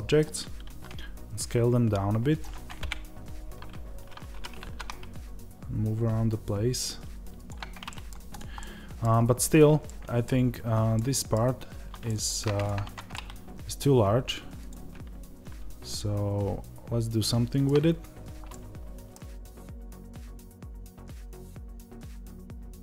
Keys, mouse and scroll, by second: 0.1-0.6 scroll down 1, 0.6 s, 2.3 click, 2.7 KP_0, 7.8 middle click, 8.2 click, 8.5-12.5 middle drag, 9.0-9.7 scroll up 2, 12.5 click, 12.7 Tab, 13.0-14.6 middle drag, 14.6 click, 15.9-19.9 middle drag, 19.8 3, 19.9 click, 20.7 o, 20.8 scroll up 1, 21.0-22.4 middle drag, 21.1 g, 22.4 click, 22.4 middle click.